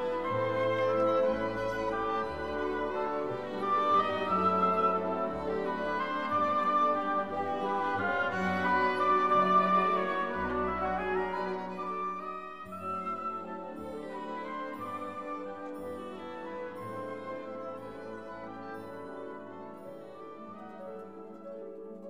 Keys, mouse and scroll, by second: 1.3-1.6 scroll down 2, 3.9 click, 6.8 click, 8.5 1, 8.8 0, 10.6-18.3 typing, 19.5 0.